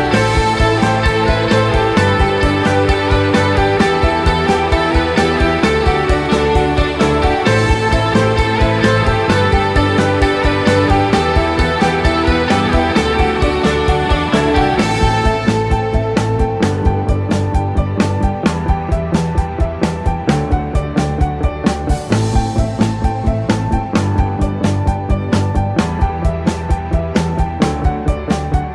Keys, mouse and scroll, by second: 1.0 click, 1.6 click, 3.0 Tab, 3.8 click, 4.9 click, 5.6 Tab, 6.0 scroll up 1, 7.8 click, 8.0 scroll up 3, 9.1 alt+click, 9.7-10.2 scroll down 4, 11.2 click, 13.4-14.6 scroll up 1, 14.6 click, 15.7 g, 20.0 scroll up 1, 21.2 click, 21.2 scroll up 1, 22.0 click, 23.7 click, 26.7 click, 27.0 click, 28.6 click.